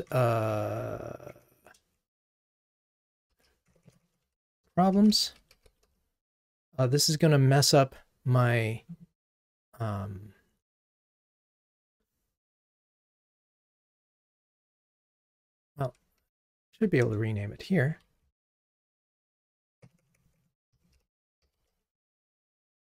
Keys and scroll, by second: 16.2 ctrl+t, 17.0 shift+F6.